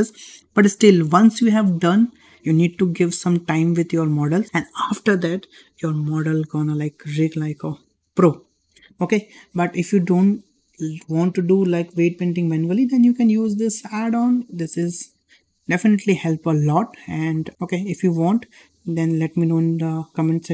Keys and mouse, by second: 9.9-10.2 shift+middle drag, 13.3-20.5 drag.